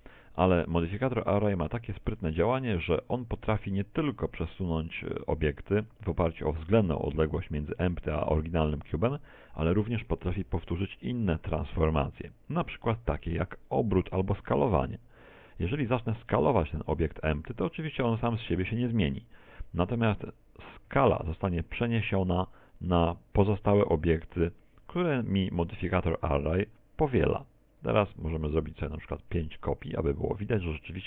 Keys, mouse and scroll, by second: 2.2 middle click, 18.1 z, 19.9 z, 20.9 s, 24.5 ctrl+click, 27.7 right click, 29.3 click, 29.6 click.